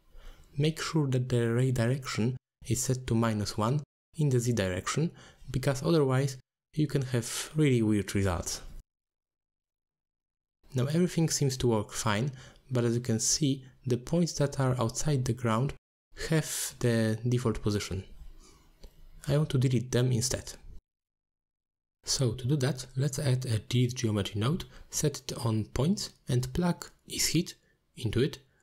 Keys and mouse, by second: 1.2 middle click, 2.7 click, 4.4 click, 4.7 click, 5.3 click, 6.4-6.7 middle drag, 7.9 alt+shift+click, 8.8-10.1 middle drag, 11.4 click, 12.5 click, 13.1 g, 14.4 g, 16.1 click, 18.1 g, 20.1 click, 20.8 a, 23.0 click, 24.5 middle drag, 25.2 click, 25.9-28.6 drag.